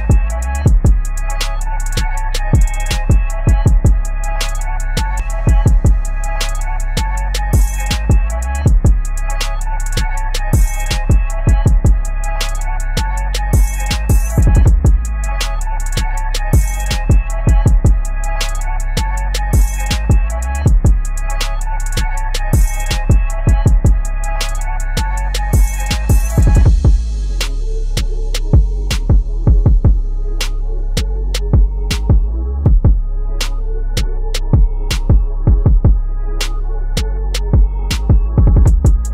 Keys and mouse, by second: 2.7 ctrl+=, 4.6-7.2 alt+shift+drag, 7.2 b, 7.8 shift+click, 8.7 v, 9.2-11.0 shift+drag, 11.0 ctrl+a, 11.6 click, 12.0 ctrl+d, 13.0 i, 13.6 right click, 14.5-17.8 drag, 17.8 v, 18.8-23.4 drag, 23.4 ctrl+[, 24.9 v, 25.6-27.4 drag, 27.4 ctrl+t, 28.5-34.3 alt+shift+drag, 36.0 ctrl+j, 36.2 ctrl+[, 37.4 click.